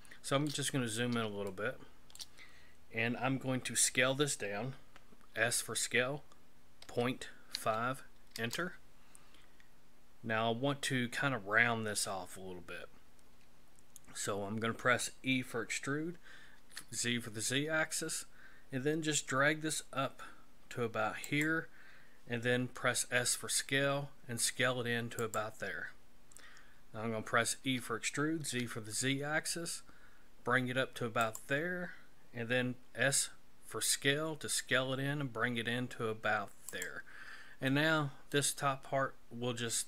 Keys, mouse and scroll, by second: 0.7-1.2 scroll up 4, 1.5 shift+middle click, 5.4 s, 9.6-10.0 scroll up 4, 15.3 e, 23.0 s, 27.6 e, 33.0 s, 37.7 middle click.